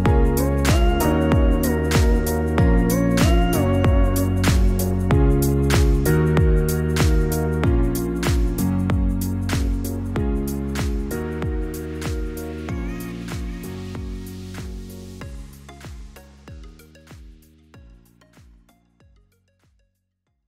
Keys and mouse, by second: 7.2 click.